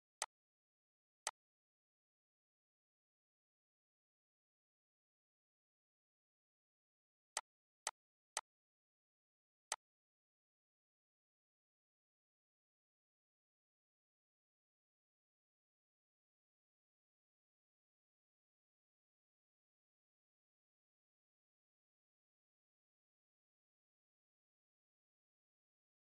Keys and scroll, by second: 3.8 ctrl+a, 6.5 ctrl+g.